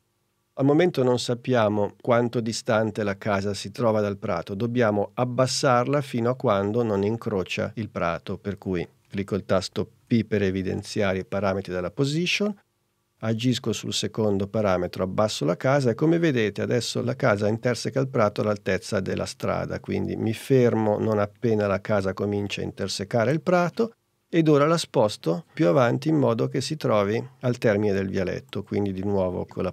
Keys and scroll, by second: 9.9 p.